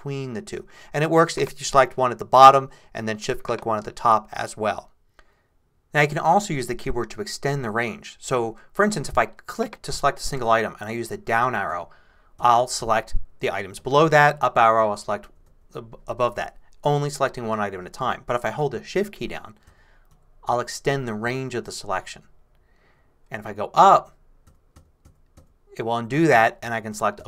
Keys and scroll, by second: 11.7 Down, 14.4 Up, 19.7 shift+Down, 20.9 shift+Down, 23.9 shift+Up, 24.5 shift+Up.